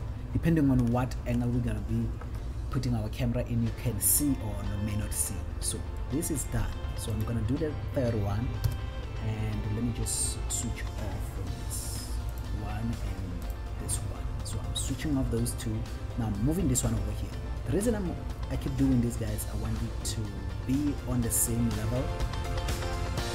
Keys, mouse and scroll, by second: 0.2-1.9 shift+middle drag, 3.3 scroll down 1, 6.3 middle click, 6.9-7.6 scroll up 1, 7.6 click, 8.9 KP_1, 12.6 click, 13.7 click, 15.0-16.0 scroll down 3, 19.1 scroll down 1, 19.9 scroll down 1, 21.8 scroll up 1.